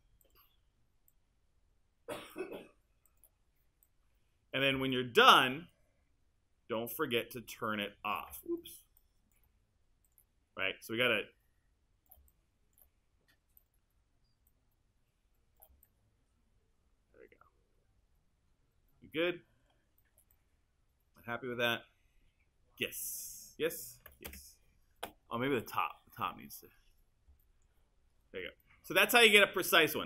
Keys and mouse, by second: 24.3 space.